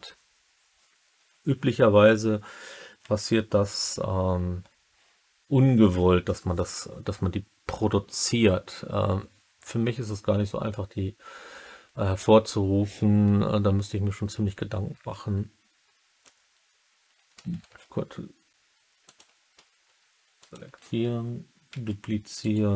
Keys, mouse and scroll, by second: 17.6 ctrl+s, 19.1 click, 20.4 shift+click, 20.4 typing, 21.6 shift+d, 22.3 right click.